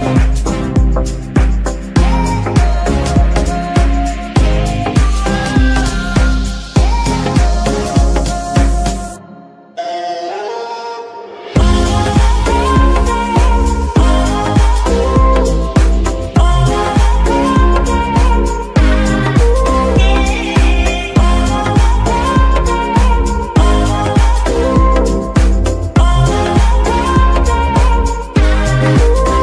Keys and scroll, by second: 0.1 g, 10.6 Tab, 11.0 shift+s, 12.3 Tab, 12.7 shift+s, 13.7 KP_2, 14.0 KP_3, 15.6 g, 15.7 y, 20.1 KP_Decimal, 22.3 g, 24.4 z.